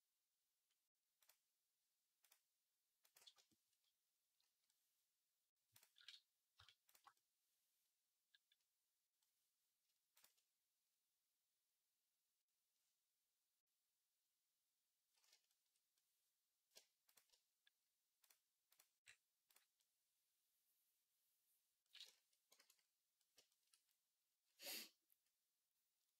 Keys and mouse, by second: 2.0 click, 2.0 middle click, 2.9 click, 2.9 middle click, 6.7 shift+click, 6.7 shift+middle click, 10.0 shift+click, 10.0 shift+middle click, 16.9 shift+click, 16.9 shift+middle click, 18.1-19.4 drag, 18.1-19.4 middle drag, 23.6 ctrl+s.